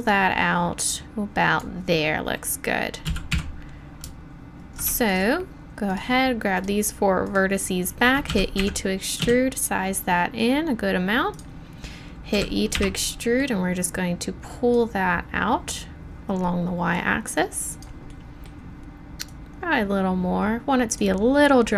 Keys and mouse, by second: 3.0 z, 3.3 a, 8.3 e, 9.2 s, 12.3 e, 13.0 click, 17.4 middle click, 19.3-21.7 middle drag.